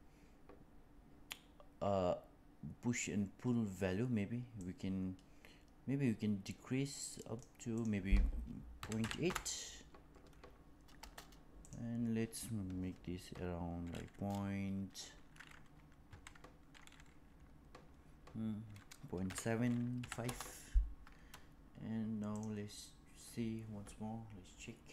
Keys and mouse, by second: 4.5-7.4 drag, 7.8-11.1 drag, 11.6-21.2 drag, 22.3 click.